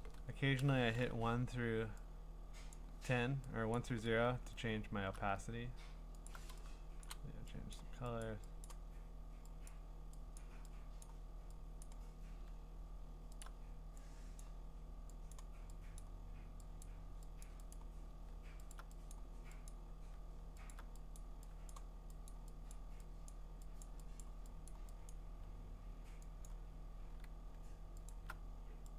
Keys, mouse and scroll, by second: 2.8 click, 3.8 click, 4.2-5.1 alt+scroll, 6.3 alt+click, 7.8 click, 8.2 click, 8.7 click, 9.7 click, 10.4 click, 11.0 click, 11.8 click, 13.4 alt+click, 13.5 alt+click, 14.4 click, 15.3 click, 16.0 click, 16.5 alt+click, 16.8 click, 17.4 click, 17.8 click, 18.7 alt+click, 19.1 click, 19.7 click, 20.7-23.8 alt+click, 21.2 click, 21.7 click, 22.3 click, 22.7 click, 23.3 click, 24.2 click, 24.7 click, 25.1 click, 26.5 click, 28.1 alt+click.